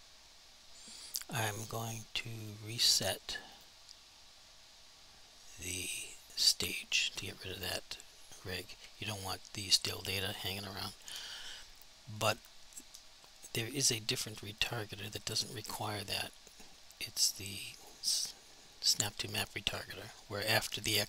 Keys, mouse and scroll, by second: 2.4 click, 6.4 click, 14.6 click.